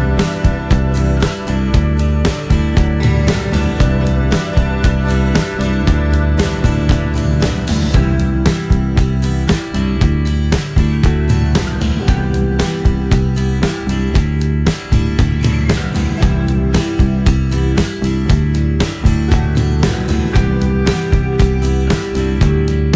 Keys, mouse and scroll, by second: 2.9 c, 11.3 x, 15.1-16.9 middle drag, 19.4 Tab.